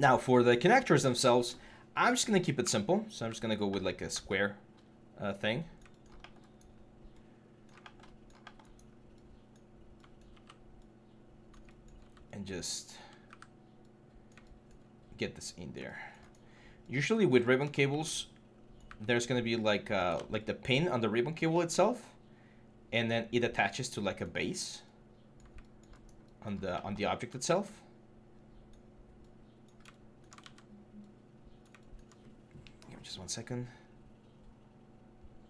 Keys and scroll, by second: 2.4 w, 13.1 w, 19.9 ctrl+z, 30.2 ctrl+z.